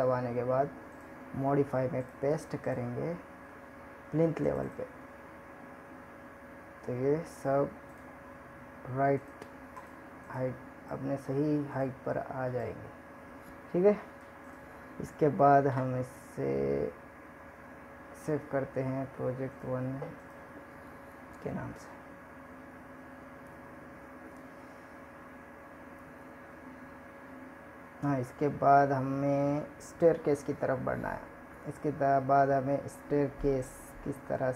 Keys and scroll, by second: 15.6 ctrl+s.